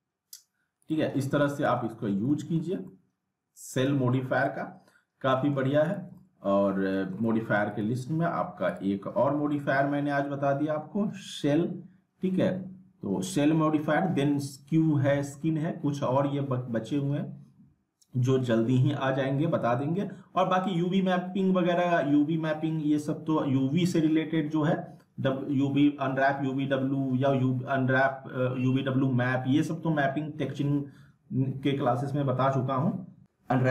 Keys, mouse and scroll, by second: 0.8 click, 1.6 z, 1.8 middle click, 2.7 scroll up 1, 2.8 alt+middle click, 3.0-4.4 alt+middle drag, 4.3 scroll down 1, 4.4-5.7 alt+middle drag, 5.9 click, 6.2-7.5 middle click, 7.7 click, 9.5 s, 10.3 s, 16.1-16.5 scroll down 1.